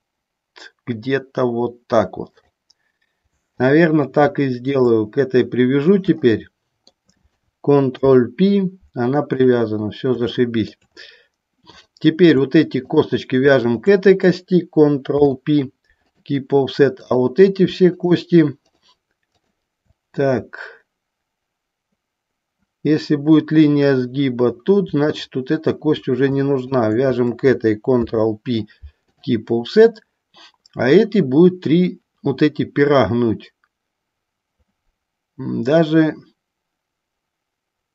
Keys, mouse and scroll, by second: 2.5 click, 3.7 click, 4.8 shift+click, 6.4 shift+middle click, 8.1 ctrl+p, 10.6 shift+middle click, 11.8 click, 12.9 shift+click, 13.8 shift+click, 15.3 ctrl+p, 17.0 click, 18.0 shift+click, 18.8 shift+click, 19.5 shift+click, 28.1 ctrl+p.